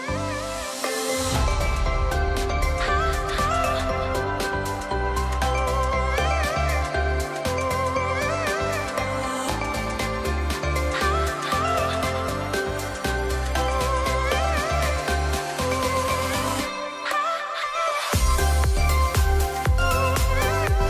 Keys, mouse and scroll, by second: 3.5-5.0 drag, 12.2 ctrl+d, 13.3 click, 16.0 click, 18.9 alt+scroll up 1, 19.6 space, 19.8-20.4 drag.